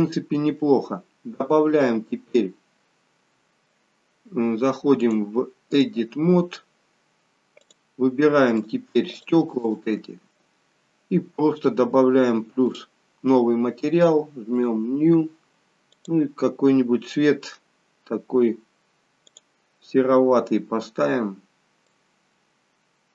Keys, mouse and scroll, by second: 1.1-1.9 scroll down 1, 5.6 click, 7.7 click, 8.6 shift+click, 9.2 shift+click, 12.8 click, 14.7 click.